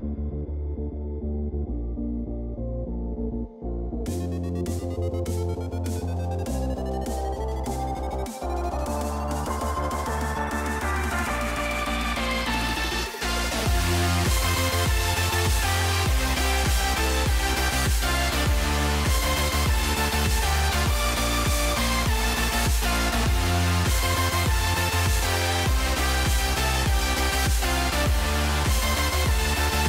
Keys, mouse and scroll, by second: 4.1 click, 7.9 click, 10.1-12.4 drag, 16.6-20.9 drag, 26.2 click, 27.4 click.